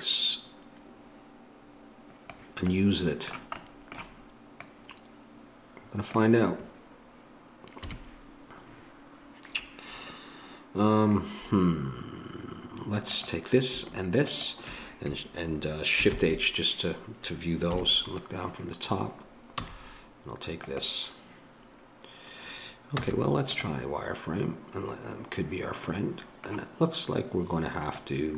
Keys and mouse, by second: 4.6-6.1 middle drag, 6.1-7.8 drag, 7.8 KP_Decimal, 13.1-16.1 drag, 16.1 shift+h, 17.7 KP_7, 19.6 a, 20.6-22.9 drag, 22.9 z, 27.8-28.3 drag.